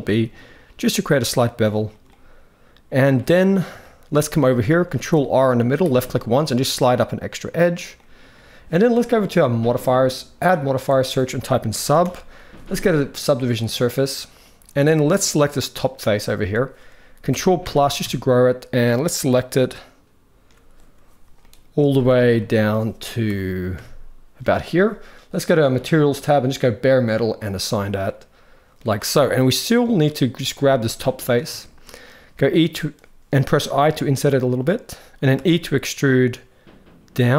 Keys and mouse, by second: 1.8 middle click, 3.5 shift+middle click, 4.6 ctrl+r, 7.6 middle click, 9.3 click, 10.1-13.3 drag, 14.1 middle click, 17.0 ctrl+KP_Add, 17.3 ctrl+KP_Add, 17.7 ctrl+KP_Add, 21.1 middle click, 21.6 shift+middle click, 22.1 middle click, 23.0 ctrl+KP_Add, 23.5 ctrl+KP_Add, 25.4 click, 26.3 click, 27.8 middle click, 30.4 middle click, 31.3 shift+middle click, 33.5 i, 35.3 e.